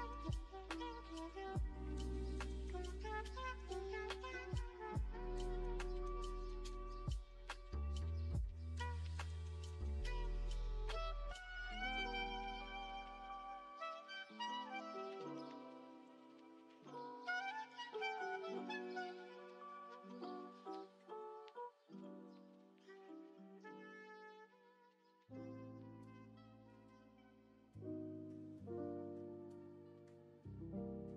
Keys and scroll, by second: 4.4 Down, 5.3 1, 6.2 1, 6.7 ctrl+space, 9.0 Return, 9.4 Return, 10.7 s, 16.4 g, 17.0 g, 22.7 space, 23.2 space, 23.2 space, 25.6 space, 26.1-26.5 space, 28.6-29.6 scroll, 30.5 F1.